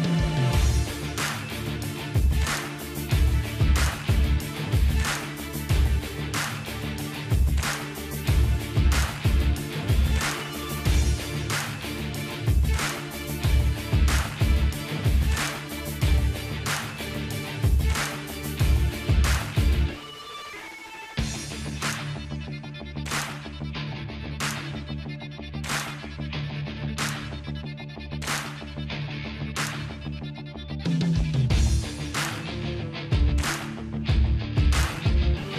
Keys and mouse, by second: 0.5-3.2 drag, 0.5 KP_0, 1.9 alt+h, 3.2-6.9 middle drag, 4.2 click, 4.2 right click, 5.3 s, 9.2 click, 9.3-10.7 middle drag, 9.3 right click, 10.4 click, 10.6 right click, 11.4-12.9 middle drag, 13.9 click, 14.9-17.1 middle drag, 17.7-20.2 middle drag, 18.5-19.8 drag, 18.5-19.8 right drag, 19.8 ctrl+s, 20.6 middle click, 20.8-21.8 drag, 21.3 Tab, 21.8 middle click, 22.1-24.2 drag, 24.3-26.3 drag, 25.1 ctrl+z, 29.3 click, 30.3 middle click, 30.7 shift+click, 31.2-35.5 middle drag.